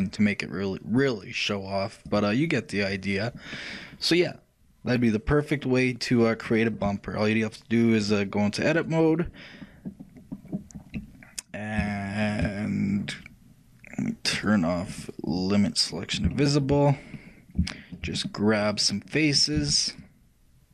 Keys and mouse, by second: 1.1-3.1 shift+drag, 3.6-5.6 middle drag, 6.7-8.1 middle drag, 8.1-9.9 drag, 9.9-11.5 middle drag, 12.1 shift+middle click, 12.3 shift+middle click, 12.4 shift+middle click, 14.0 shift+middle click, 14.5-16.5 shift+drag, 16.4 shift+middle click, 17.0 shift+click, 17.0 shift+middle click, 19.0 shift+middle click, 19.2 shift+middle click, 19.7 shift+c.